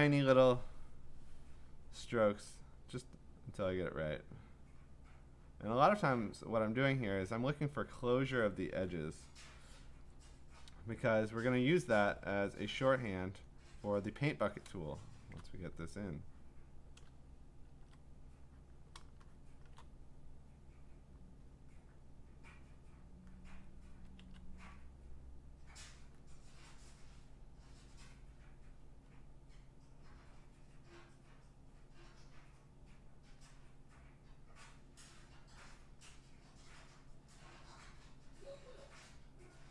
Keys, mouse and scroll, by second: 0.0 click, 0.0 click, 0.2 click, 2.9 click, 3.8 click, 4.8 click, 5.6 click, 6.1 click, 7.1 click, 9.6-13.1 typing, 11.4 click, 13.0 click, 13.6 click, 14.0 click, 14.9 click, 15.3 click, 16.6 click, 17.7 ctrl+z, 18.0 click, 18.7 click, 19.0 click, 19.6 click, 19.6 click, 19.8 click, 21.7 click, 23.0 click, 24.2 ctrl+z, 26.1 click, 27.6 click, 33.4 click, 36.0 click, 39.4 click.